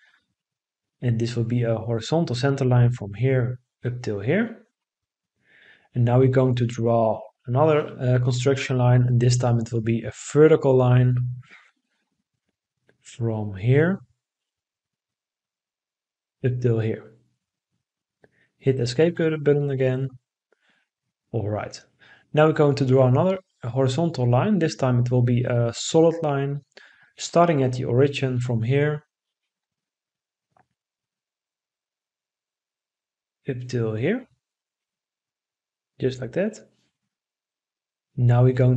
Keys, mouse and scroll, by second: 4.1 Escape, 18.4 Escape, 34.4 Escape.